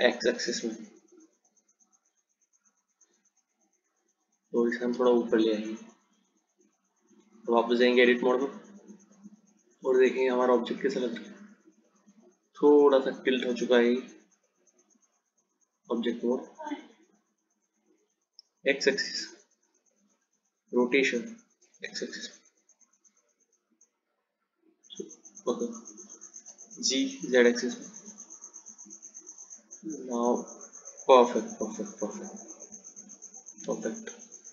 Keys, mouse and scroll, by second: 5.0 g, 8.2 Tab, 10.4 click, 14.8-16.3 drag, 18.7 click, 21.0 r, 26.6 g, 33.7 Tab.